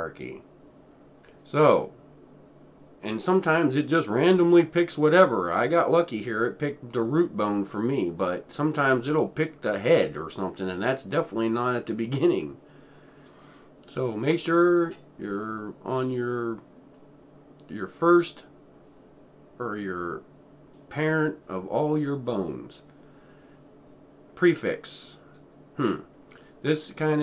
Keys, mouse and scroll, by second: 1.4 click, 1.4 typing, 25.2 click.